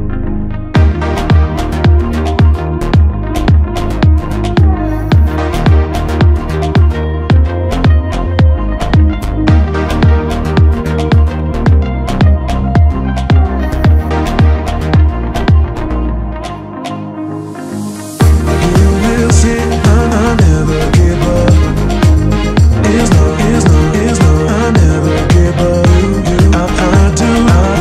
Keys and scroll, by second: 0.9 Escape, 1.1 Delete, 1.6 F3, 2.7 Return, 2.9 Escape, 3.5 ctrl+d, 7.5 Return, 11.7 Escape, 12.6 Delete, 13.5 alt+7, 14.1 alt+a, 14.5 Escape, 16.3 alt+5, 16.9 F3, 18.0 Return, 23.9 Return, 25.0 Escape, 25.6 alt+7.